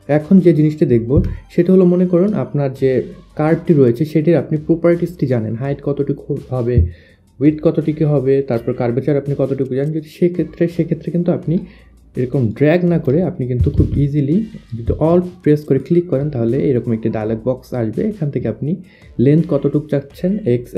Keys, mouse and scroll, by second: 0.7 Delete, 1.3 Delete, 2.2 Delete, 12.1 click, 12.5 click, 13.4 ctrl+z, 13.7 click, 15.0 click, 17.2 alt+click.